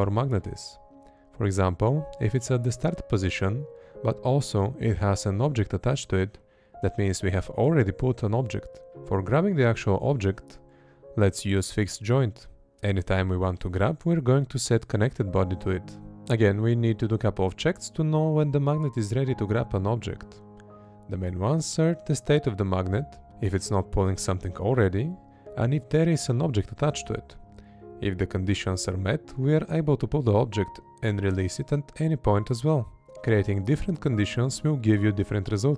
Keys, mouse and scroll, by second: 3.0 space, 5.1 Up, 5.6 Up, 7.4 Down, 7.8 Right, 9.0 space, 9.8 Left, 12.8 space, 13.5 Up, 14.3 Up, 16.0 Down, 16.3 Right, 17.7 space, 18.1 Left, 21.5 space, 24.6 Right, 25.9 space, 27.1 Left, 28.1 Left, 29.9 space, 32.3 Right, 34.9 space, 35.5 Left.